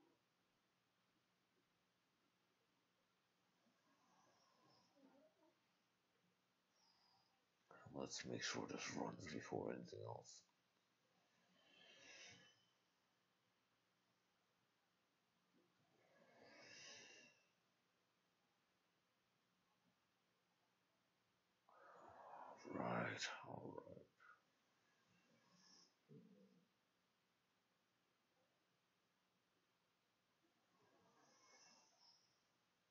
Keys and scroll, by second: 1.1-2.3 typing, 3.7 ctrl+shift+a, 4.1 ctrl+shift+s, 6.1 typing.